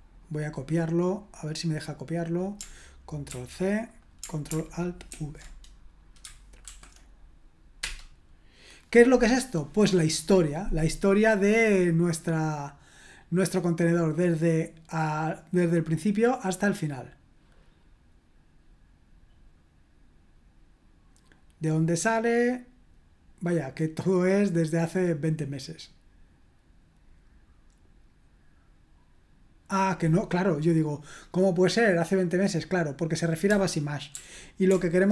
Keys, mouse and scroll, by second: 0.2 middle click, 0.4 middle click, 3.3 ctrl+c, 5.1 ctrl+alt+v, 6.6 ctrl+l, 7.8 Return, 30.1-31.2 drag, 34.1 ctrl+p, 34.6 ctrl+BackSpace.